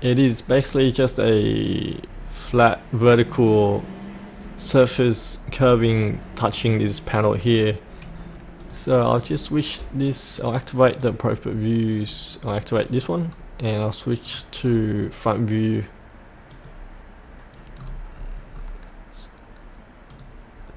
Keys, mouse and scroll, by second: 7.4-8.6 scroll up 1, 8.6 click, 9.1-10.3 scroll down 1, 10.3 click, 13.3 scroll up 1, 14.3 click, 14.6-16.5 scroll down 1, 16.5 click, 17.8-18.5 scroll down 1, 20.1-20.7 drag.